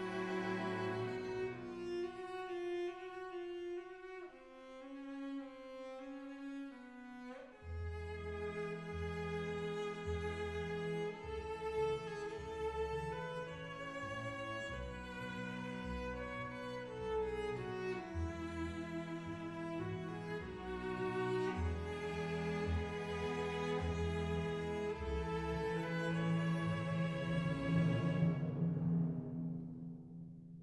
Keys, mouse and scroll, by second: 0.0 click, 0.8 ctrl+r, 2.8 click, 5.7 2, 6.4 shift+click, 7.4 shift+click, 7.9 shift+click, 11.0 g, 11.2 y, 13.9 click, 19.0 alt+click, 20.1 KP_1, 22.8 e, 23.3 z, 27.5 click, 28.1 super+f, 29.3 alt+z, 29.7 3, 30.5 KP_1.